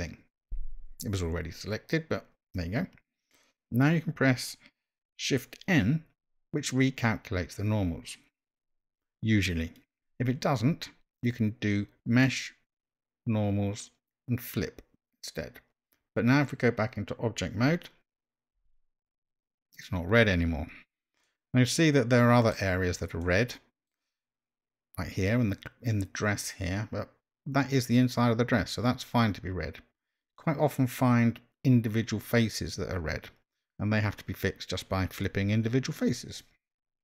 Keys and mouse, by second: 0.6 a, 6.2 shift+n, 12.1-15.2 drag, 18.7 Tab, 21.2-22.5 middle drag, 23.2-23.9 middle drag, 30.4-30.9 middle drag.